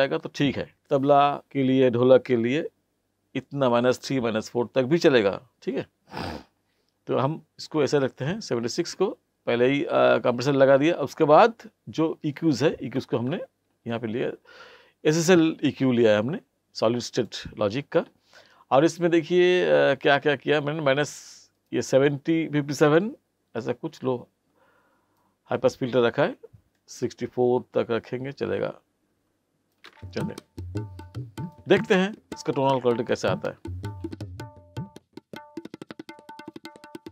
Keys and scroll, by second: 29.8 space.